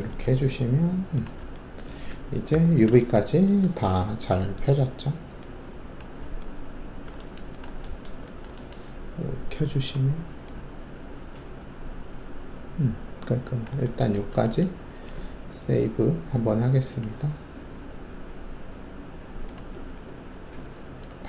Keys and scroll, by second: 2.5 alt+5.